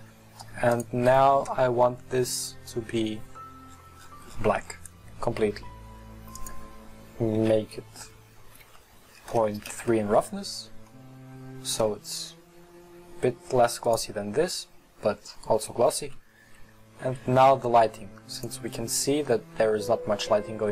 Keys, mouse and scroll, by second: 0.8 click, 3.3 click, 9.8-10.1 drag, 13.9 right click, 15.1-15.7 scroll up 2, 17.4 scroll down 3, 18.3 click, 19.3-20.7 middle drag.